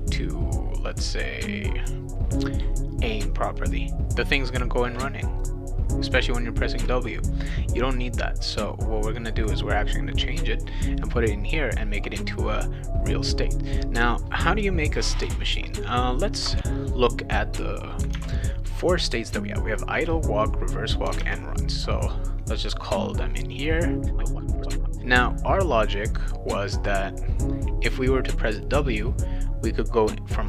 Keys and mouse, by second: 1.5 click, 13.4 click, 18.1 alt+Tab, 21.2 alt+Tab, 23.5 click, 24.2 click, 24.5 click, 24.6 click, 24.7 click, 24.9 click, 26.9 click, 28.5 click, 29.5 click.